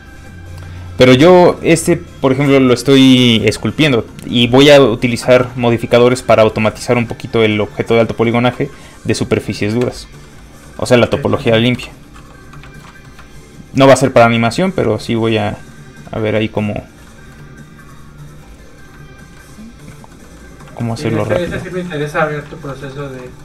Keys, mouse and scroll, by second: 1.0 shift+middle click, 6.0 shift+middle click, 6.6 middle click, 6.7 shift+middle click, 7.1 middle click, 7.2 middle click, 9.9 shift+middle click, 10.2 middle click, 10.3 middle click, 11.7 i, 12.1 f, 12.3 click, 12.6 shift+middle click, 12.9 middle click, 13.0 middle click, 14.1 shift+f, 14.3 click, 15.3 middle click, 16.7 click, 17.1 middle click, 17.6 click, 18.6 shift+click, 19.4 middle click, 20.7 click, 21.0 middle click, 21.1 z, 21.4 shift+middle click, 21.7 middle click, 21.9 alt+shift+z, 22.2 middle click, 22.5 alt+shift+z, 23.0 shift+middle click, 23.0 z.